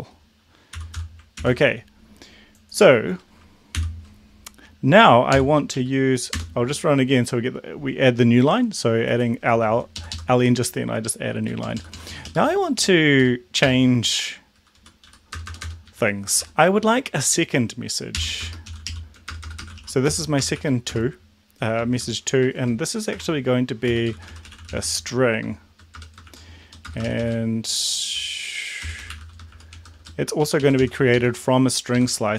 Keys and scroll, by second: 0.7-1.5 typing, 3.7 ctrl+;, 5.3 ctrl+l, 5.6 Up, 6.3 Return, 10.1 shift+Left, 11.6 Down, 11.8 Down, 12.0 Down, 12.0 Down, 12.3 Down, 13.6 BackSpace, 14.0 Down, 14.0 Right, 14.8 Up, 15.1 End, 15.3 Return, 15.4 Return, 15.6 Return, 15.8 Up, 16.4 Tab, 18.1-20.9 typing, 22.4-27.0 typing, 28.7-30.8 typing, 30.5 Right, 30.6 Right, 31.0 Left, 31.2 Left, 31.9 Left, 32.2-32.3 typing.